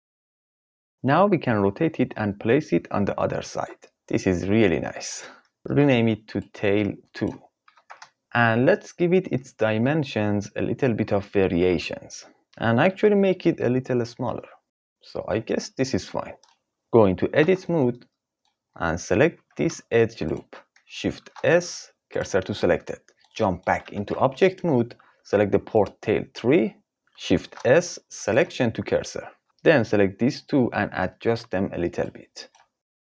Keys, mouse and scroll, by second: 0.1 right click, 1.7 r, 5.6 F2, 8.2 n, 8.5-10.4 drag, 11.0-12.3 drag, 13.0-14.7 drag, 14.6 KP_5, 14.9-15.5 scroll up 1, 15.5-17.3 middle drag, 17.3 Tab, 19.3 2, 21.1 shift+s, 23.8 Tab, 27.4 shift+s, 29.4 KP_3, 29.9 click, 31.1 g.